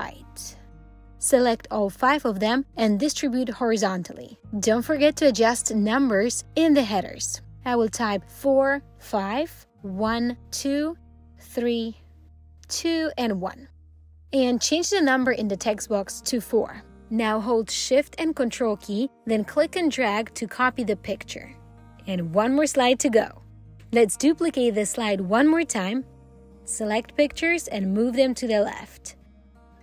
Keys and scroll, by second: 3.1 alt+h, 4.5 alt+h, 24.3 ctrl+d.